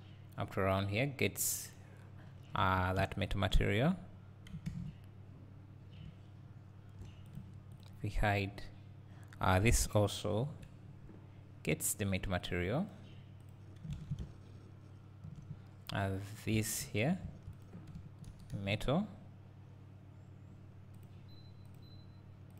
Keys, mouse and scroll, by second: 1.8 click, 2.4-2.7 scroll down 2, 2.7 Tab, 3.0 `, 4.0 scroll down 2, 4.2-5.4 scroll up 1, 5.4-6.1 scroll down 2, 6.1 `, 7.4 click, 9.6 click, 10.5 KP_Decimal, 13.5-16.1 drag, 14.0 alt+a, 16.6 Tab, 16.8 Tab, 17.3 1, 17.6 click, 18.3 ctrl+KP_Add, 21.1-22.5 drag.